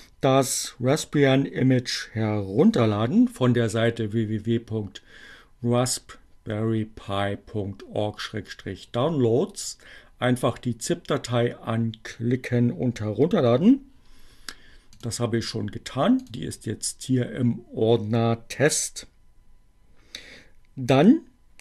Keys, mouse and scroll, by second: 15.8 click.